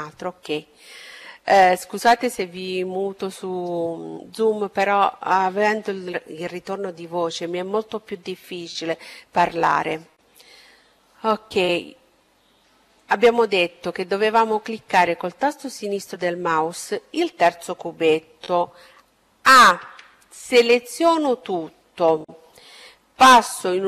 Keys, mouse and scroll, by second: 11.9-13.7 drag, 18.7 a, 22.8 z.